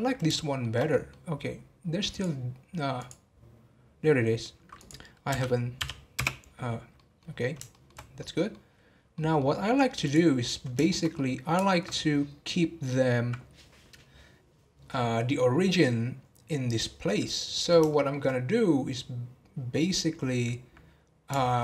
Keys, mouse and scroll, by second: 0.0 scroll up 2, 0.3-1.4 shift+middle drag, 1.4-2.1 scroll up 1, 2.1-7.0 drag, 7.0 middle click, 7.2 scroll down 4, 7.7 shift+middle drag, 8.0 scroll down 2, 8.2-10.0 middle drag, 10.0 click, 10.4 scroll down 1, 10.7-11.9 shift+middle drag, 11.9-13.9 scroll up 6, 17.2-17.9 scroll down 1, 17.9-21.6 shift+middle drag.